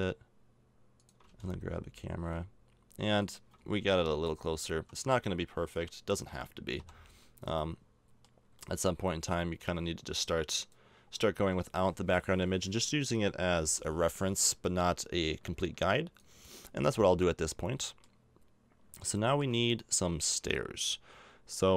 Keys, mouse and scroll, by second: 1.2 g, 4.1 a, 4.7 z, 5.6 right click, 6.8 KP_Decimal, 9.3-11.1 drag, 11.4 Tab, 13.6 l, 14.6-16.6 drag, 16.7 middle click, 17.9 middle click, 19.1 middle click, 20.2 a.